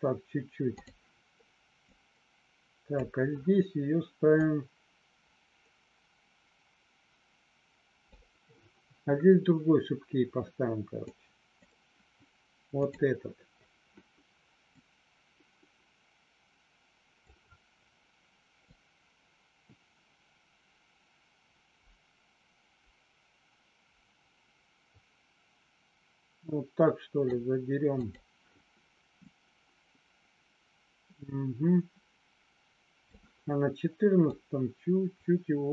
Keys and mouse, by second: 2.0 click, 4.2-8.1 drag, 11.1 click, 12.8 click, 14.7-17.2 drag, 18.7-27.4 drag, 28.0 click, 29.2-33.2 drag, 34.4-35.7 drag.